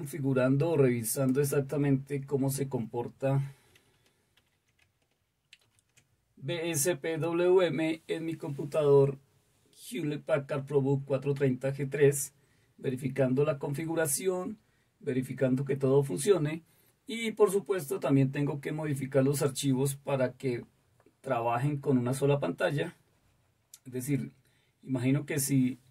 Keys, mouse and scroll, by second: 1.1 click, 4.3 super+8, 5.6 super+3.